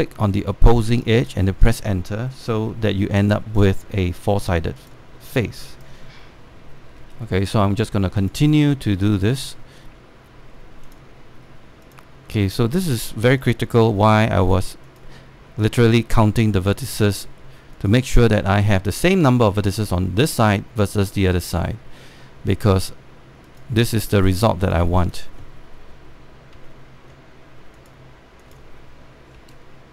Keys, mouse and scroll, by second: 0.5 click, 1.9 Return, 2.3-3.7 scroll down 1, 4.0 alt+middle click, 5.5 click, 7.7 Return, 8.9 click, 10.1 Return, 11.6 click, 12.8 Return, 14.1 click, 16.1 Return, 17.3 click, 18.8 Return, 23.2 click, 24.1 Return, 26.2-27.2 scroll down 1, 27.7 alt+middle click, 28.4 click.